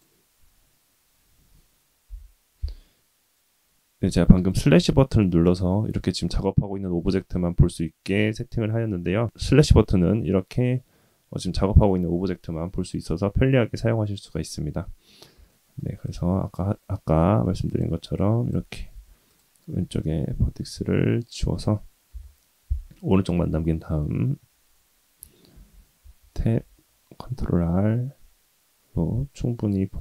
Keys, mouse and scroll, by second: 2.1 /, 15.6 shift+middle click, 16.0 click, 17.7 click, 18.1 click, 18.9 x, 19.7 Tab, 22.1 /, 25.5 ctrl+r, 26.0 Tab, 26.5 ctrl+r.